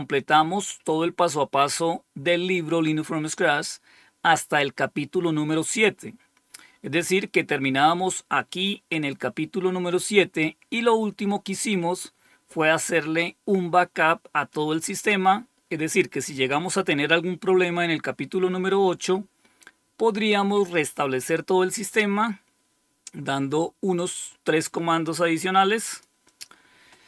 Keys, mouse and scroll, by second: 0.1 click, 3.4-4.3 scroll down 1, 4.3-7.1 scroll down 7, 7.1-8.9 scroll down 1, 8.9 click, 10.9-11.5 scroll down 2, 12.0 scroll down 2, 19.7-21.0 scroll down 3, 21.0 scroll down 1, 23.9-25.9 drag, 26.2 click.